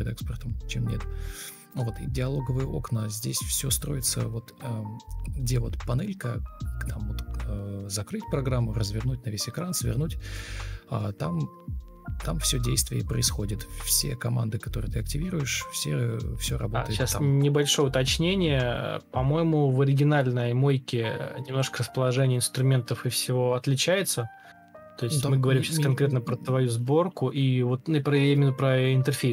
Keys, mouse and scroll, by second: 0.0-0.4 typing, 2.7 Return, 2.7-4.0 typing, 6.4 space, 7.3 ctrl+k, 8.8 ctrl+space.